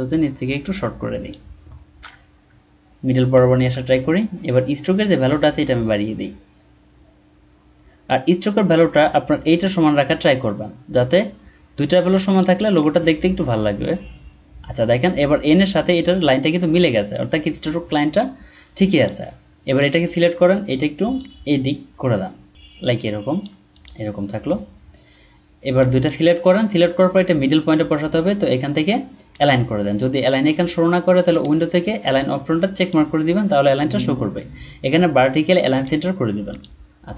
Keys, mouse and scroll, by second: 2.5 typing, 12.4 double click.